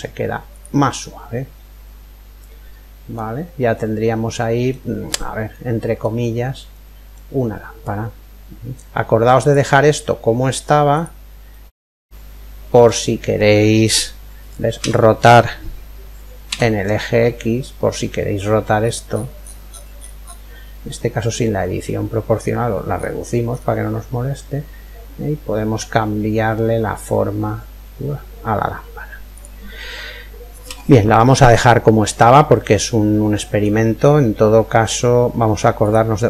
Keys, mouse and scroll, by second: 0.6-2.5 middle drag, 3.4-8.3 middle drag, 11.1-12.9 middle drag, 13.3-15.1 middle drag, 14.4 r, 31.0-32.9 ctrl+middle drag, 35.4 click.